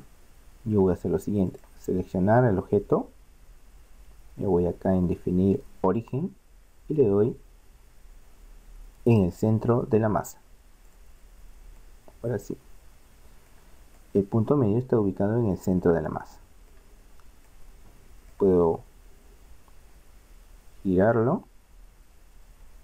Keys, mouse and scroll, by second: 2.7 click, 6.0 click, 11.8 middle click, 19.6 r.